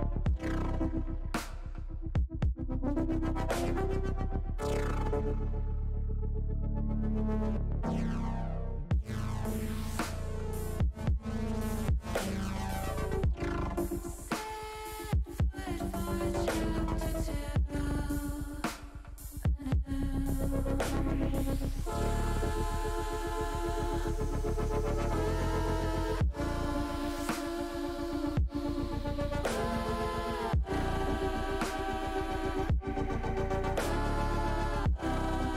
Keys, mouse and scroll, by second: 5.6 a, 8.2 click, 9.0 l, 14.1 click, 15.5-16.7 middle drag, 17.0 middle click, 17.9 middle click, 20.8 click, 22.4 click, 24.1 click, 25.2-29.4 drag, 31.5 click, 32.4 click.